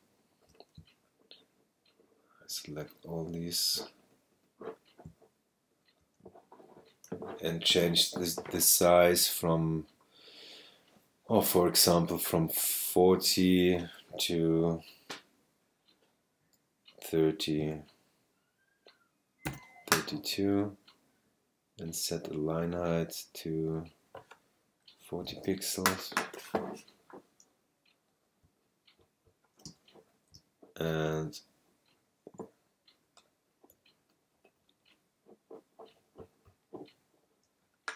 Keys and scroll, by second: 0.8 shift+super+space, 17.6 3, 19.4 2.